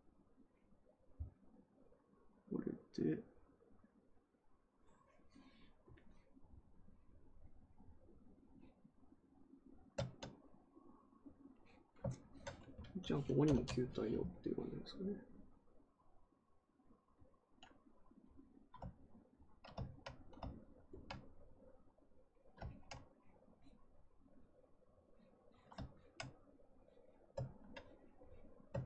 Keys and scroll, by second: 13.2-13.9 typing, 27.3 ctrl+z, 28.7 ctrl+z.